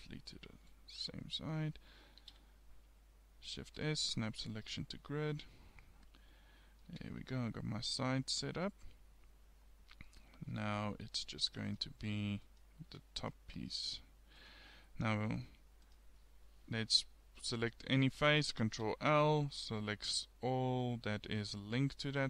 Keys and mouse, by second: 1.4 click, 2.2 shift+s, 6.6 middle click, 6.9 Tab, 9.3 middle click, 11.0 KP_1, 12.9 Tab, 18.9 ctrl+l, 21.4 middle click.